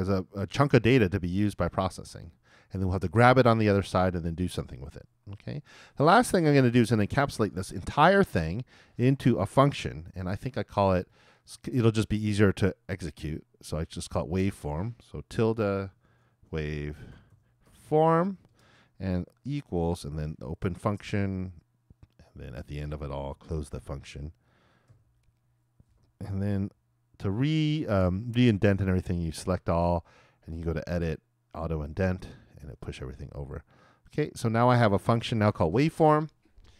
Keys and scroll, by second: 15.9 shift+`, 16.5 shift+w, 19.9 shift+space, 20.2 shift+[, 23.5 shift+Return, 23.7 shift+], 24.9 shift+;, 29.2 super+a.